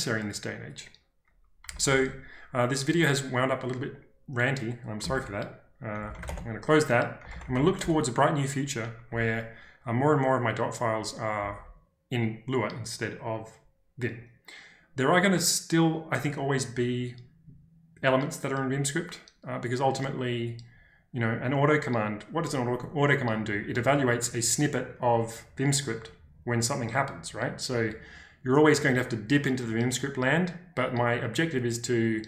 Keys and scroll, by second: 1.6 typing, 5.0-8.0 typing, 9.0 typing, 11.3 typing.